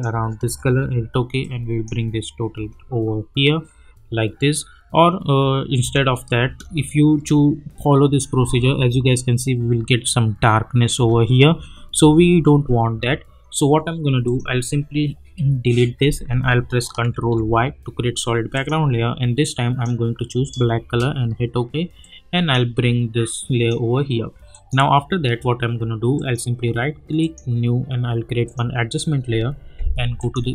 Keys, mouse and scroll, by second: 0.1 Return, 1.4 click, 2.5 space, 5.8 space, 8.4 space, 10.9 space, 14.2 click, 16.9 click, 17.1 ctrl+y, 18.5 click, 20.3 Return, 22.0-24.5 drag, 26.1 right click, 27.2 click.